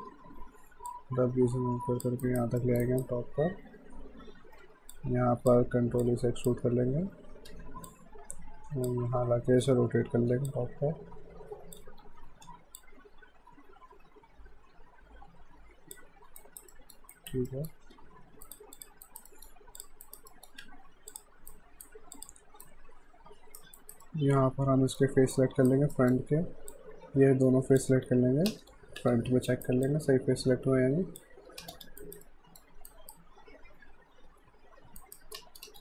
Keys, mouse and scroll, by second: 0.9 click, 2.2 alt+right click, 2.6 alt+middle click, 2.9 alt+right click, 3.6 e, 4.6 w, 4.9 click, 6.1 click, 7.0 ctrl+e, 7.9 click, 9.2 e, 10.3-11.2 typing, 10.5 click, 12.8 click, 16.4 alt+right click, 16.7 alt+middle click, 17.1 alt+right click, 17.5 alt+middle click, 18.0 w, 18.5 right click, 18.8 click, 19.1 alt+right click, 19.3 alt+middle click, 19.8 click, 20.1 alt+right click, 20.3 alt+middle click, 20.6 q, 21.1 click, 21.5 right click, 22.1 click, 22.6 right click, 23.8 alt+right click, 24.1 alt+middle click, 25.3 alt+right click, 26.0 alt+middle click, 26.7 click, 28.2 w, 28.5 space, 29.0 f, 29.5 alt+right click, 29.9 alt+click, 31.6 space, 32.0 alt+right click, 32.3 alt+middle click, 32.9 alt+right click, 35.0 alt+right click, 35.4 space.